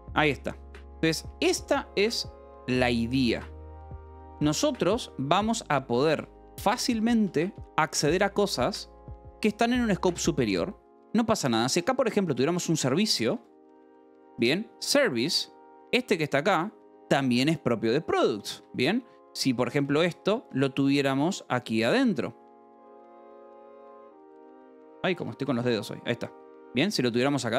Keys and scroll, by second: 0.0-0.1 typing, 1.3 k, 3.3 ., 4.3 Escape, 4.7 j, 5.5 k, 6.2 j, 7.6 Escape, 7.8 k, 11.0-14.3 typing, 19.0 Escape, 20.1 j, 21.5-26.7 typing, 23.5 Escape, 24.2 Escape, 27.1 Escape.